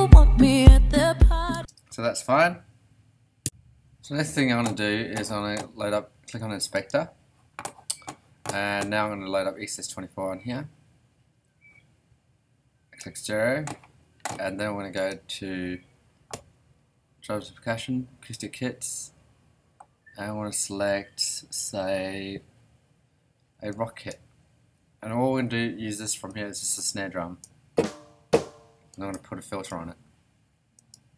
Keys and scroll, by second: 1.5 space.